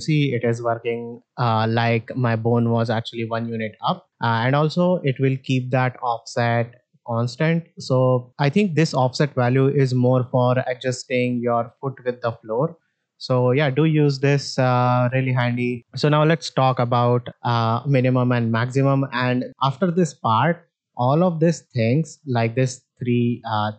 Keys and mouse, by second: 2.6 click, 3.2-3.8 drag, 5.0-7.2 drag, 13.2-15.0 drag, 23.4 click.